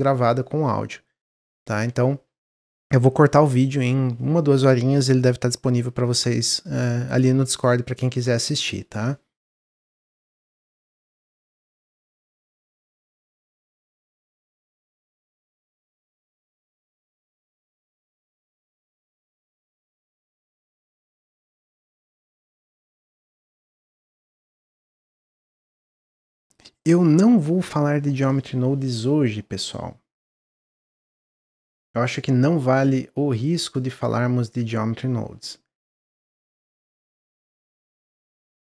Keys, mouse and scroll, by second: 26.4 click, 26.7-29.9 middle drag.